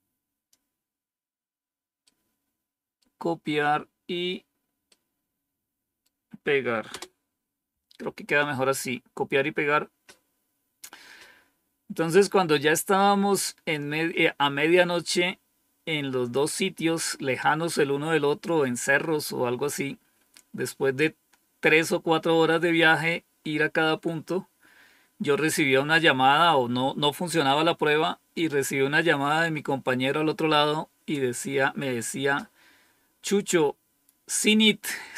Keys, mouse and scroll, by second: 1.9-3.1 right drag, 4.8 right click, 6.8 Return.